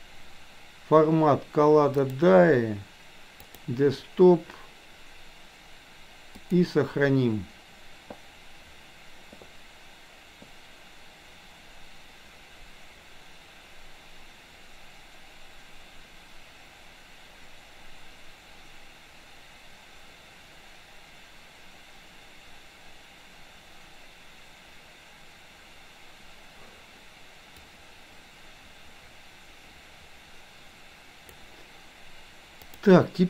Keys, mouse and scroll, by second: 27.6-31.3 drag, 32.6-33.2 drag.